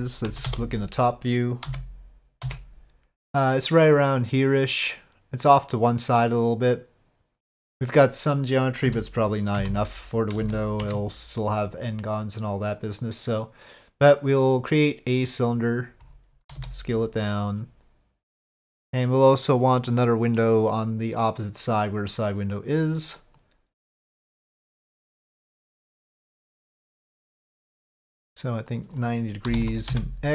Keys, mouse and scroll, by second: 0.2 KP_5, 0.4 KP_7, 1.6 z, 6.2-7.5 middle drag, 8.8 z, 10.4 z, 12.8-15.7 drag, 16.6 s, 18.7-19.8 drag, 19.9 middle click, 22.0 click, 23.4 click, 25.0-25.6 middle drag, 28.7-30.3 drag.